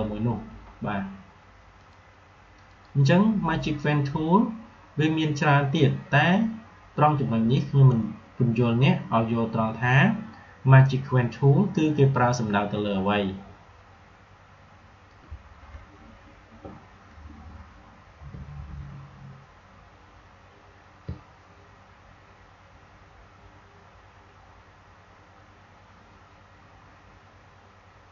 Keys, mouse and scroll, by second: 1.7 click, 15.0 click, 28.0 click.